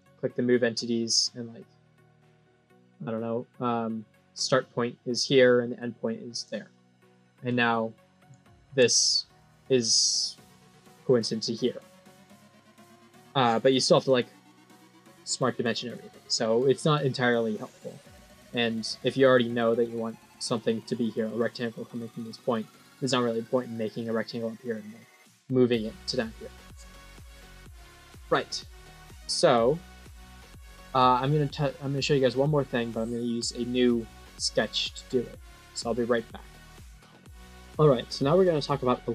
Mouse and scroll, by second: 5.1 click, 6.3 click, 7.2 scroll up 2, 7.5 scroll down 6, 8.4 middle click, 12.8 right click, 13.9 click, 16.3 middle click, 16.8-17.3 scroll up 3, 18.3 scroll down 5, 18.9 middle click, 27.4 middle click, 38.3 middle click.